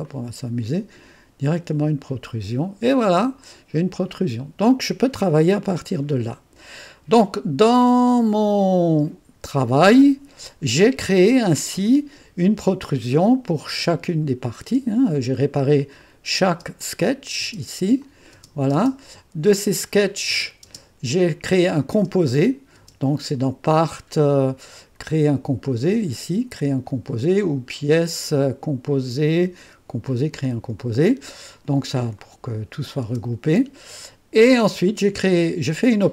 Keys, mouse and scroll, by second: 0.0 click, 1.4 click, 3.0-5.0 drag, 8.4 click, 13.2 click, 13.7-14.6 typing, 16.0 click, 17.4 click, 18.0 click, 18.5-18.9 scroll, 19.9 click, 20.3-20.8 scroll, 21.2-22.5 drag, 22.7 click, 25.6 click, 26.8 click, 28.0 click, 30.7 click, 31.0 typing, 32.1 click, 32.7 click, 32.8-33.5 typing.